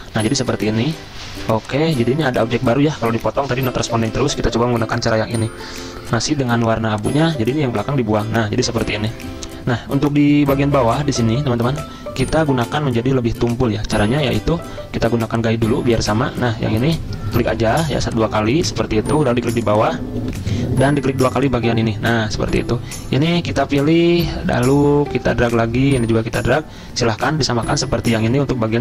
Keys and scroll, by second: 3.6 Delete, 7.7 Delete, 20.2 F10, 20.3 F10.